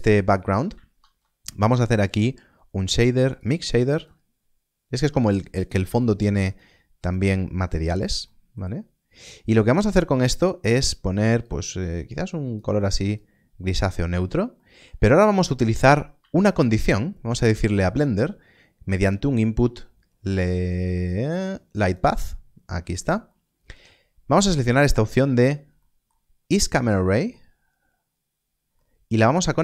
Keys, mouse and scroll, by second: 0.9 shift+a, 3.2 click, 8.2 middle click, 10.3 middle click, 11.5 click, 14.5 middle click, 14.9 scroll down 1, 15.4 middle click, 16.1 shift+a, 21.8 shift+a, 23.2 middle click, 25.3 scroll up 1, 25.7 middle click, 27.3-28.7 scroll down 1, 28.7 middle click.